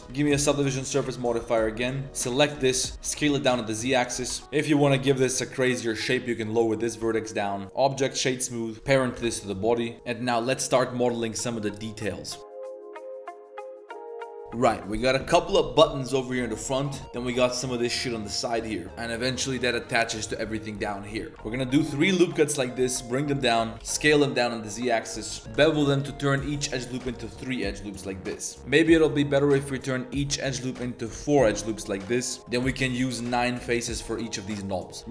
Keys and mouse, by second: 0.0 KP_Decimal, 0.0 s, 0.1 ctrl+1, 0.5 ctrl+2, 0.9 click, 1.1 shift+drag, 1.4 drag, 1.8 drag, 2.0 Tab, 2.0-3.0 typing, 2.2 click, 4.1 z, 4.3 Tab, 4.4 click, 4.4 Tab, 4.4 1, 4.5 click, 4.8 g, 7.0 Tab, 7.2-8.4 drag, 7.6 s, 7.6 z, 8.7 ctrl+3, 9.1 ctrl+p, 21.3 ctrl+r, 21.5 ctrl+r, 25.5 ctrl+b, 32.5 3, 33.0 ctrl+shift+click, 35.0-35.1 typing.